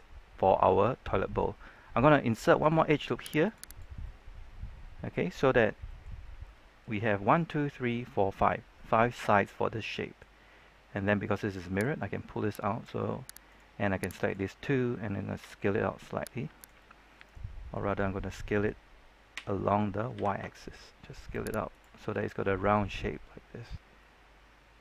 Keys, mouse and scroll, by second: 1.0-2.1 scroll up 1, 2.4 ctrl+r, 3.4 click, 3.6 right click, 4.0-5.7 middle drag, 6.1 scroll up 1, 6.4-10.8 middle drag, 11.7-12.8 drag, 13.4 right click, 14.1 shift+right click, 15.3 s, 16.5 right click, 16.7 middle click, 19.3 s, 20.1 y, 21.6 click, 21.9 scroll down 1, 22.0 middle click, 23.7 scroll up 1, 23.9-24.8 middle drag.